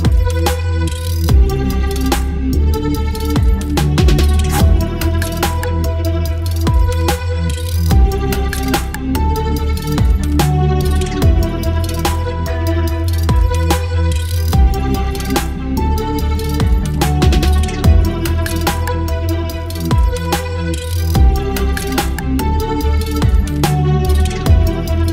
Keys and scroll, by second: 0.9 b, 2.3-6.0 typing, 7.8 v, 8.3 ctrl+t, 9.0 Return, 9.2 Up, 9.3 Left, 14.0 space, 15.0-17.9 typing, 19.2 [, 19.8 space, 21.1 x, 22.3-23.3 typing, 24.5 x.